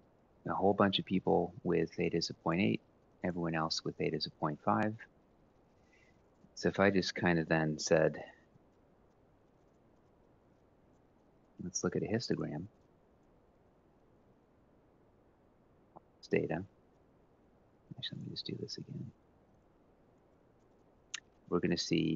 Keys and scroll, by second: 15.7 ctrl+shift+Down.